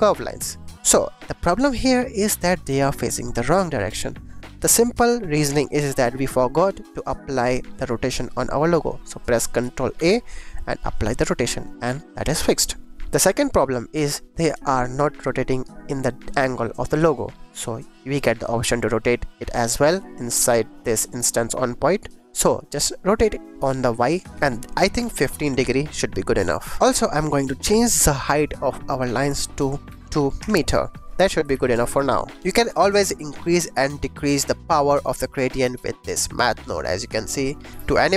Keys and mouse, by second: 0.8-2.1 drag, 2.5-3.3 drag, 4.6-5.7 drag, 6.0 click, 8.2-8.7 drag, 9.9 ctrl+a, 11.7-12.6 drag, 13.3 shift+click, 14.6 shift+click, 17.7 click, 19.8 click, 22.2 click, 23.4-25.4 drag, 26.8 ctrl+s, 27.0 click, 29.0-30.4 drag, 30.9 shift+click, 31.5 ctrl+s, 37.9 g, 38.0 x.